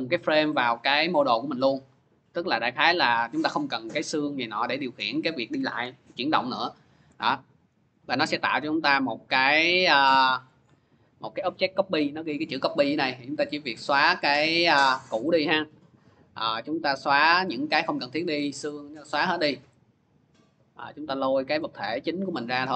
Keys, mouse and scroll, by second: 8.2 click, 8.9 click, 10.4 click, 12.1 click, 13.9 click, 14.2 Delete, 15.8 click, 17.8 click, 18.2 Delete, 19.0 click, 20.2 click, 21.1 click, 22.2 click, 22.5 Delete.